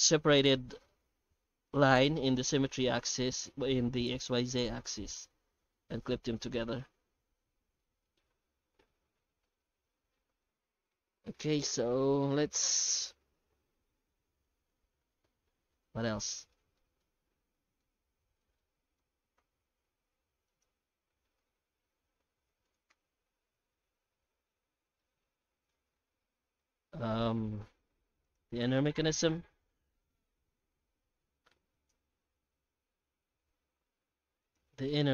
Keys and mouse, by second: 7.8 Tab, 8.7 alt+a, 9.6-10.1 alt+middle drag, 10.4-10.9 middle drag, 16.8-17.2 shift+middle drag, 17.2 Tab, 17.5 middle click, 18.0 shift+middle click, 18.7 shift+middle click, 19.4 3, 20.5 alt+shift+right click, 21.4 i, 22.9 Tab, 23.7-24.5 middle drag, 25.0-25.7 shift+middle drag, 26.2-26.6 shift+middle drag, 26.9-27.8 alt+middle drag, 28.2 right click, 28.9 h, 29.3-30.1 middle drag, 30.6 alt+h, 31.1 alt+a, 31.7 right click, 34.4 right click.